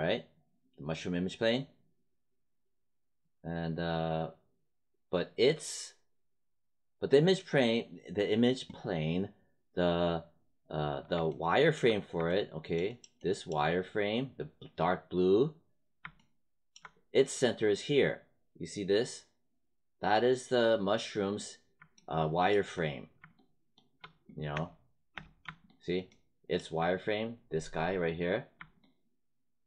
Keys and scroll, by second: 24.5 space.